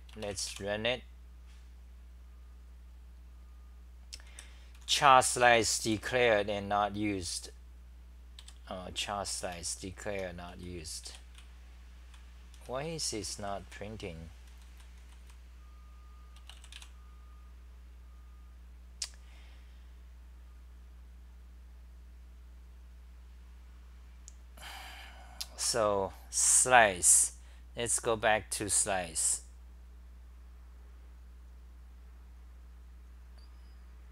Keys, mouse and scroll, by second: 4.3 w, 4.9 g, 5.1 g, 5.8 g, 8.2-11.1 typing, 12.3-15.0 typing, 16.8-29.8 r.